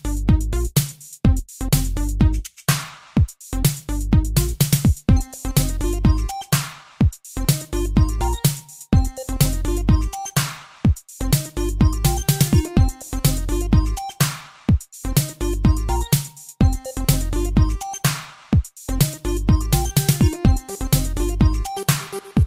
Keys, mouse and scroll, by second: 0.1 click, 0.7 shift+space, 2.6 Escape, 3.0 space, 3.7 Escape, 4.2 shift+space, 6.0 Escape, 7.2 click, 9.6 click, 9.8 click, 11.1 d, 13.6 click, 14.1 shift+space, 15.2 Escape, 16.9 b, 17.2 click, 18.7 g, 19.3 click, 19.4 click, 20.0 click, 20.7 shift+space.